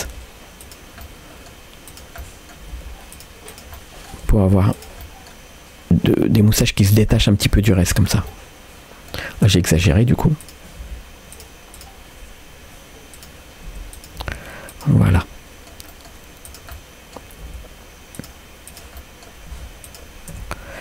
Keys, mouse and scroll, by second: 0.1 g, 1.0 middle click, 1.9 click, 2.2 middle click, 2.8 g, 3.5 click, 3.8 middle click, 4.3 g, 5.0-6.4 middle drag, 7.1 scroll down 1, 7.5 middle click, 7.8 Tab, 8.0 scroll down 1, 8.3 middle click, 9.3 scroll up 2, 9.5 Tab, 9.7 middle click, 10.4 click, 10.8 g, 11.8 click, 13.2 click, 13.7 r, 14.2 g, 15.1 middle click, 15.9 middle click, 16.5 click, 16.7 middle click, 17.5 g, 18.7 click, 19.0 middle click, 19.6 g, 20.4 Tab, 20.6 scroll down 1.